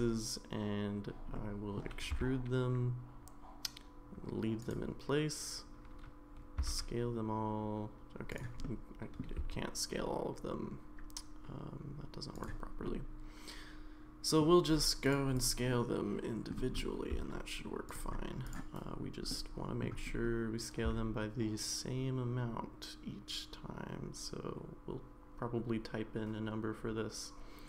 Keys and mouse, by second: 1.3 middle click, 2.1 e, 6.8 s, 8.6 middle click, 10.1 s, 12.9-14.4 middle drag, 15.7 middle click, 17.1 s, 19.3 middle click, 20.9 s.